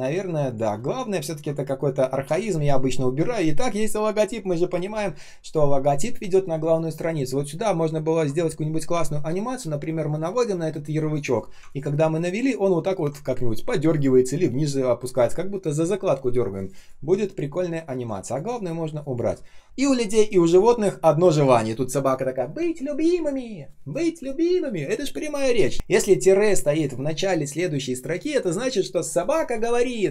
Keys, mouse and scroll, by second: 11.6 ctrl+click, 18.7 space.